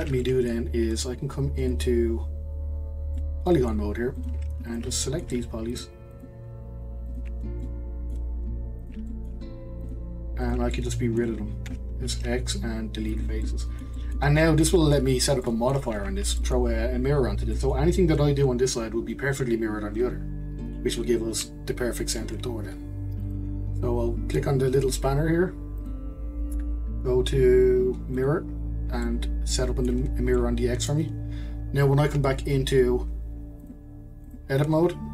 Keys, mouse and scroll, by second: 0.2 middle click, 1.2-1.6 scroll down 1, 1.6-3.2 drag, 3.2-4.2 middle drag, 4.2 click, 4.7 shift+click, 5.0 middle click, 5.7 shift+click, 6.1 shift+click, 7.1 shift+click, 7.6-8.8 middle drag, 8.8 shift+click, 9.1 middle click, 9.8 shift+click, 10.4 shift+click, 10.7 middle click, 11.7 x, 13.4 middle click, 14.4-14.8 scroll up 1, 14.8 shift+middle click, 15.2 scroll down 1, 15.4 middle click, 15.9 Tab, 16.4-20.6 middle drag, 23.2 click, 25.8-28.8 drag, 29.0-33.3 middle drag, 33.6-35.1 drag.